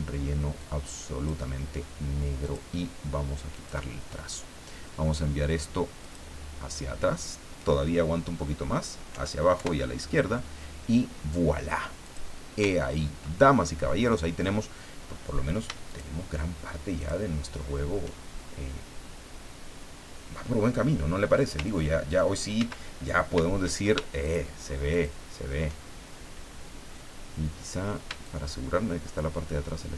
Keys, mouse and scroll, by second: 0.6 click, 2.4 click, 3.5 click, 6.0 click, 9.1 Down, 9.6 Left, 12.0 click, 12.7-13.1 ctrl+scroll down 2, 13.6 ctrl+click, 13.8 middle click, 15.9 shift+click, 17.0 shift+click, 21.7 ctrl+click, 22.6 ctrl+z, 24.2 shift+click, 24.9 shift+click, 28.2-29.9 shift+drag.